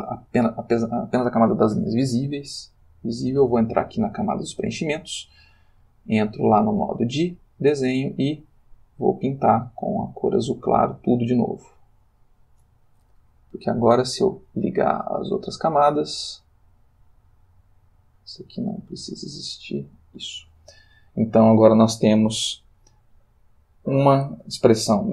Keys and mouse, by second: 2.7 click, 6.0 click, 7.0 click, 8.0 click, 9.1 click, 10.0 click, 11.7 click, 14.2 click, 14.7 click, 18.0 click, 19.0 click, 19.6 click.